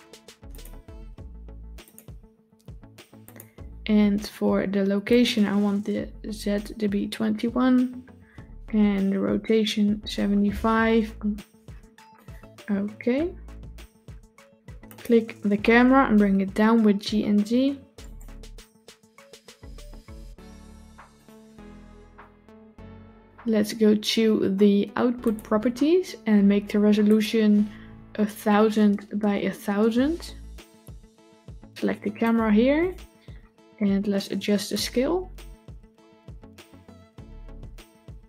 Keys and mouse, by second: 0.4 click, 1.7 click, 3.1 click, 5.1-12.0 drag, 14.8 click, 16.1 g, 18.7 g, 26.9-32.1 drag, 28.3 KP_0, 29.3 KP_0, 32.6 click, 34.8-38.2 drag.